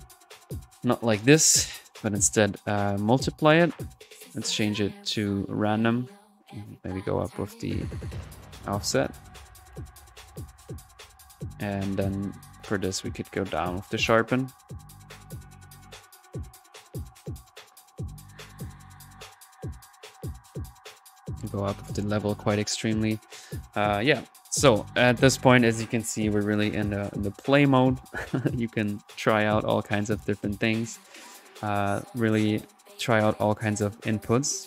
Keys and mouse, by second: 0.6 middle click, 1.4 click, 2.4 click, 2.7 click, 3.6 middle click, 4.3-6.4 drag, 6.7-9.2 drag, 9.2-11.3 middle drag, 10.1-15.6 drag, 17.0 click, 17.5-18.2 drag, 18.6 click, 19.3-19.7 drag, 28.0 click, 29.3 click, 29.7-34.3 drag.